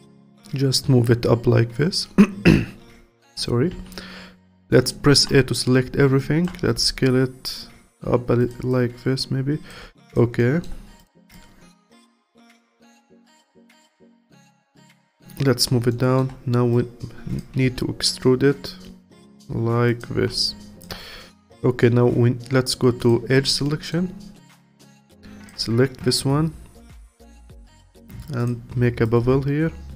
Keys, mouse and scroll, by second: 0.0-3.0 alt+drag, 3.7 a, 4.9 alt+middle click, 5.6 scroll up 1, 6.2 alt+click, 6.8 s, 8.7-10.4 alt+drag, 10.4 alt+middle click, 11.0 click, 11.3 alt+click, 12.2-14.2 alt+middle drag, 14.2 click, 15.9 alt+middle click, 16.7 click, 17.6 e, 20.4-23.6 alt+drag, 23.6 alt+middle click, 24.4 click, 24.9-27.9 alt+drag, 28.4 click.